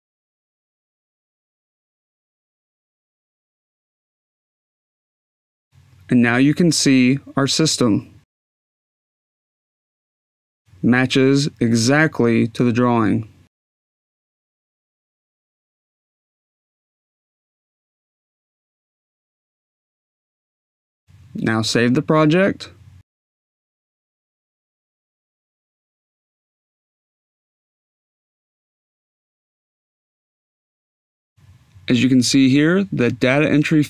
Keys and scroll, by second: 22.4-28.7 typing.